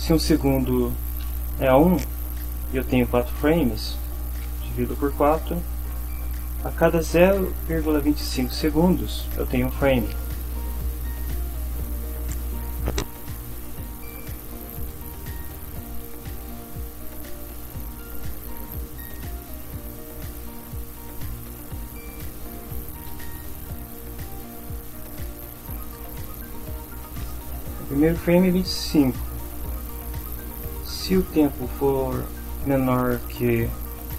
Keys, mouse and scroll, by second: 1.3 1, 3.3 /, 4.4 4, 5.3 Return, 12.7 click, 14.1 Down, 14.8 Return, 15.3 Up, 15.7 Down, 16.0 Up, 16.6 End, 17.5 Up, 18.5 Delete, 18.7 Down, 19.6 Down, 20.7-26.1 typing, 26.5 Right.